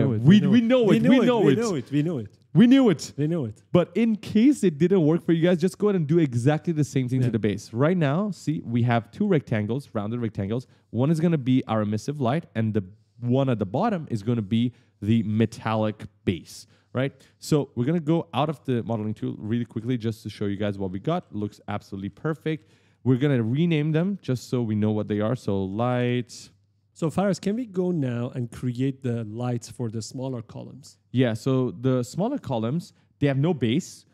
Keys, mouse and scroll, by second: 2.1 right click, 3.0 w, 3.3 right click, 7.4 click, 8.4-9.8 typing, 8.5 right click, 10.1 click, 12.5 click, 17.7 click, 18.2 click, 18.5-22.7 typing, 23.3 click, 24.2 F2, 25.2 shift+l, 25.7 t, 25.8 Return, 27.0-27.3 scroll down 1, 27.4-28.0 scroll up 2, 28.5 right click, 28.7 w, 30.0-30.3 scroll down 1, 30.4 middle click, 30.9 middle click, 31.8-32.1 scroll up 1, 32.4 middle click, 32.8-33.1 scroll up 1, 33.2 middle click.